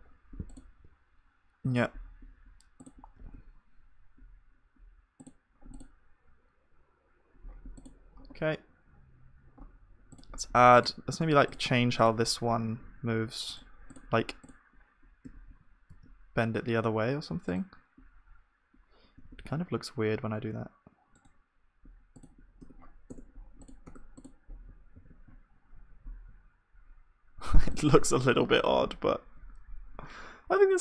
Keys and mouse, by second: 3.3 g, 5.8-7.7 drag, 5.8 g, 7.5 right click, 7.7-11.3 middle drag, 8.2-18.7 drag, 8.2-11.3 right drag, 11.3 Tab, 12.2 r, 15.3 g, 19.2 g, 22.7 Tab, 22.7-26.2 drag, 23.1 Tab, 24.9 ctrl+s, 25.7 z, 26.2-27.4 middle drag, 27.5 middle click, 28.4-29.7 drag, 28.9-30.8 middle drag.